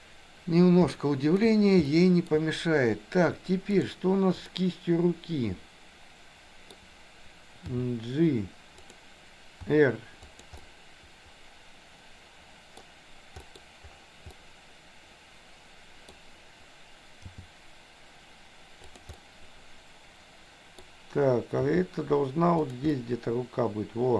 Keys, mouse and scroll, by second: 0.8 shift+middle click, 2.0 shift+middle click, 3.7 click, 4.5-6.7 middle drag, 7.7 g, 9.7 r, 10.6-12.8 middle drag, 13.5 middle click, 14.3-16.1 middle drag, 17.4 g, 19.2-20.8 middle drag, 21.7 g, 22.9 scroll up 1, 23.0-24.1 middle drag.